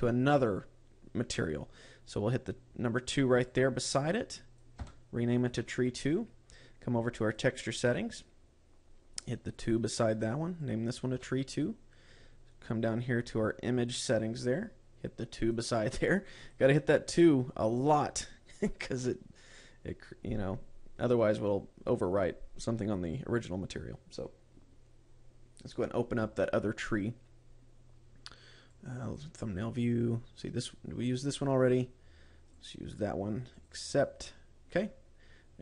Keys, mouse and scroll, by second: 2.7 click, 3.9 click, 7.7 click, 8.3-9.1 scroll up 7, 10.0 click, 10.9 click, 12.6-14.3 scroll down 8, 14.3 click, 16.9 click, 21.7-23.9 scroll up 3, 26.2 click, 34.2 click.